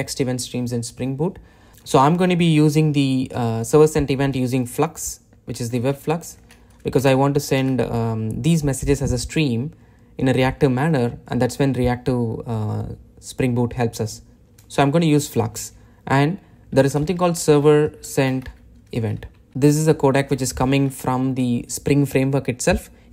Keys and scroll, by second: 1.7 shift+super+o, 7.4 Return, 20.4 Return, 21.0 super+b.